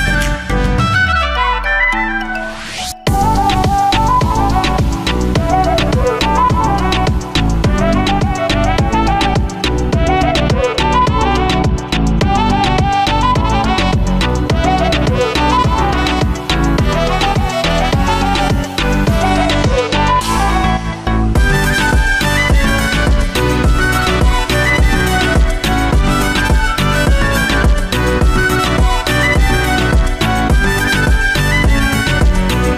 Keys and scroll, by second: 6.8 ctrl+z.